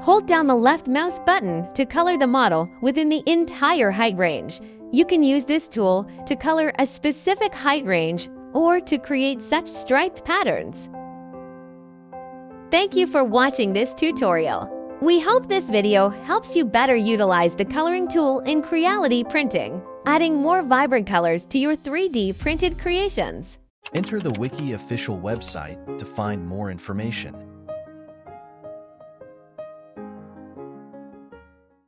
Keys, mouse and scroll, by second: 6.7 click, 9.1-9.6 scroll, 9.6 right click, 10.5 scroll, 10.9 right click.